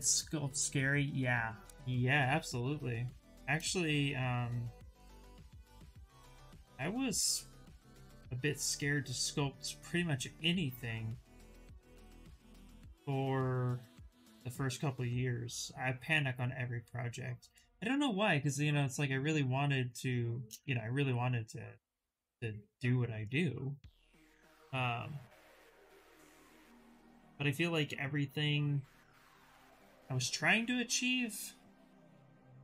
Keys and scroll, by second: 28.7 q, 32.4 shift+f.